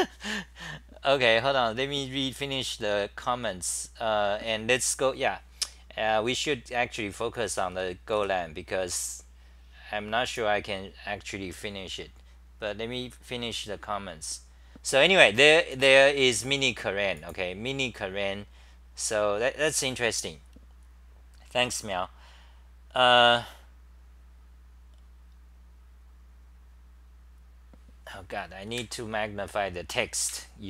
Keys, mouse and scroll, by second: 7.7 Home, 7.7 c, 8.1 Home, 8.1 w, 28.6 typing.